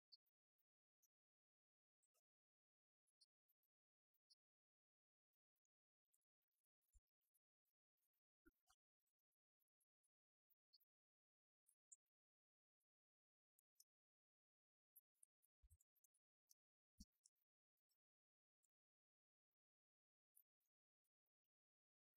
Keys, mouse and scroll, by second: 6.2 g, 20.2-22.1 drag.